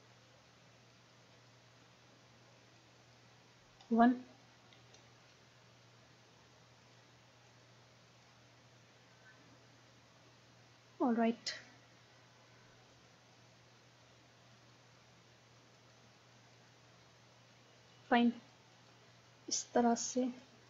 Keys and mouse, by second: 3.9 KP_1, 6.9 middle click, 7.2 click, 9.3 click, 12.9-17.3 drag, 17.3-20.6 middle drag.